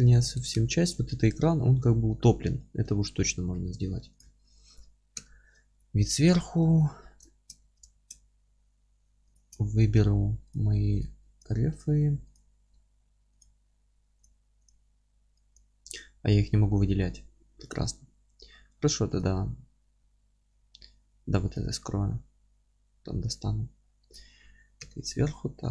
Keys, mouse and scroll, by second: 2.8 Tab, 3.9 3, 4.2 click, 5.1 KP_7, 5.6 alt+z, 6.3-6.7 scroll down 1, 6.7 alt+z, 7.6 Tab, 7.9 shift+1, 8.4-9.9 scroll up 1, 9.9-10.5 scroll down 1, 10.5 click, 11.8-14.2 alt+middle drag, 14.2 click, 16.4-19.2 middle drag, 19.2 click, 20.0 alt+q, 20.7-21.5 alt+middle drag, 21.5 click, 22.6 h, 23.2-24.8 alt+middle drag, 24.8 KP_7, 25.5-25.7 middle drag, 25.5-25.7 scroll up 2.